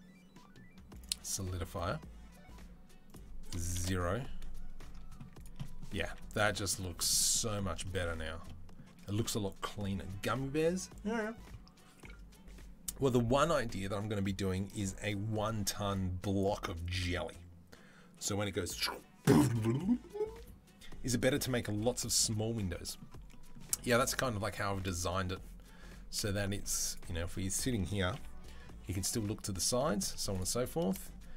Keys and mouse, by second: 5.2-30.1 middle drag, 5.8 z, 26.4 z, 27.9 KP_3, 30.1-31.0 drag, 31.0-31.3 middle drag.